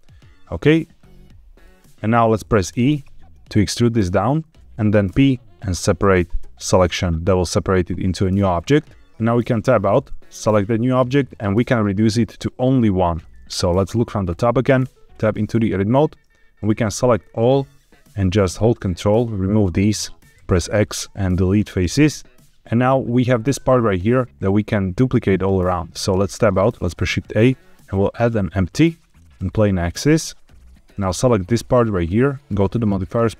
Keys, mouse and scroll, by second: 0.9 middle click, 1.8 p, 2.6 e, 4.5 click, 5.0 p, 9.3 Tab, 10.3 click, 13.4 KP_7, 14.2 scroll down 1, 14.8 Tab, 16.6 a, 17.1-17.9 scroll up 2, 18.7 ctrl+click, 20.3 x, 26.0 Tab, 26.7 shift+a, 30.8 click, 32.4 click.